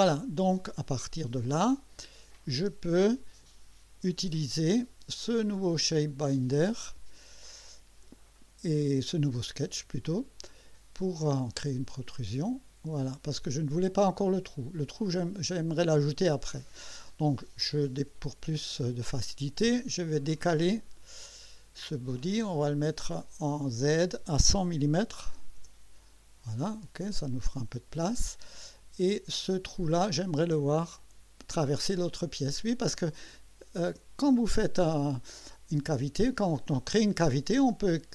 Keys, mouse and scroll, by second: 2.3 click, 2.6 space, 5.6 click, 9.6 click, 11.3 click, 13.0 click, 13.9-15.7 drag, 17.6 click, 18.7 click, 19.6 click, 20.8 click, 21.5 click, 23.7 click, 24.9 1, 25.2 0, 27.3 click, 28.3-29.6 drag, 30.0 click, 31.0 click, 32.1 click, 34.8 click, 36.9 click.